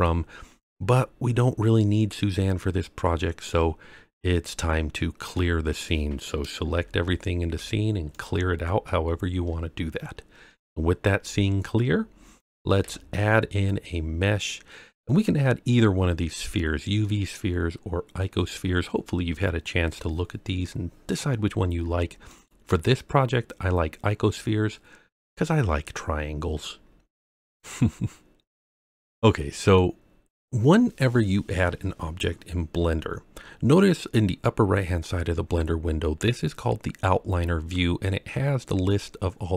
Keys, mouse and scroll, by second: 0.2-0.7 scroll down 2, 0.7-5.3 middle drag, 6.7 a, 7.5 x, 10.4 scroll down 2, 11.7-12.2 scroll up 3, 12.8 shift+a, 24.1-25.2 scroll up 2, 26.9-27.5 scroll down 4, 27.9-29.7 middle drag.